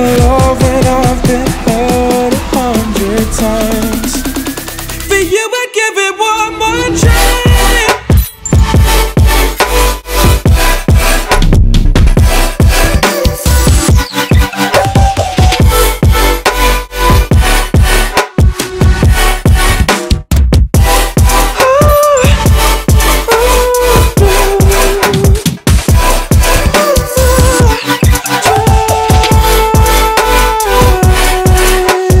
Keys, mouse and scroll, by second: 0.0 click, 1.0-2.5 alt+middle drag, 2.5 click, 3.2 click, 5.0-6.3 drag, 7.7-9.9 drag, 10.2 Tab, 11.3-11.8 drag, 11.8-12.9 scroll up 1, 12.9-16.6 drag, 16.6-18.0 scroll up 1, 18.0 click, 19.4 ctrl+click, 20.7-22.0 ctrl+drag, 23.1-26.7 ctrl+drag, 28.0 ctrl+click, 29.8 ctrl+click, 30.5-32.2 alt+drag.